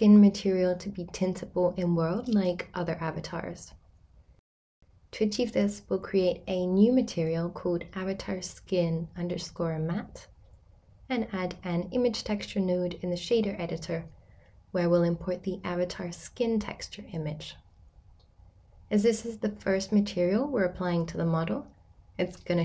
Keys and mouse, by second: 9.2 click, 11.2 middle click, 12.2 middle click, 15.0 shift+a, 20.8 x, 22.2-22.6 drag.